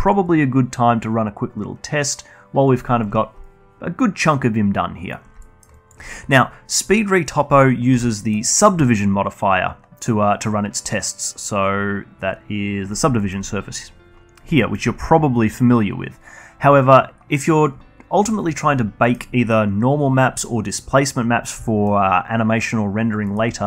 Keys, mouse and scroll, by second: 5.3-5.7 alt+middle drag, 5.7-8.1 alt+drag, 8.1-9.5 alt+middle drag, 9.5-9.9 scroll up 1, 9.9 click, 12.9 drag, 13.2 alt+middle click, 13.6-14.5 scroll down 1, 14.5 scroll down 4, 14.5-16.1 alt+middle drag, 16.1-16.5 drag, 16.5-17.5 scroll up 2, 17.5-19.0 drag, 19.0 middle click, 21.6 alt+middle drag, 21.9-23.2 alt+drag, 23.2 alt+middle click.